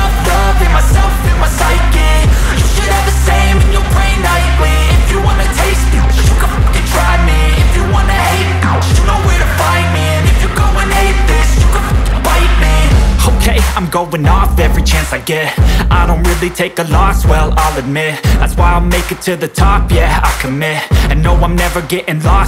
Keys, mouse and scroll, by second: 5.9-9.6 drag, 9.6 space, 10.8-15.5 drag, 15.5 space, 16.9 click, 20.9-22.4 drag.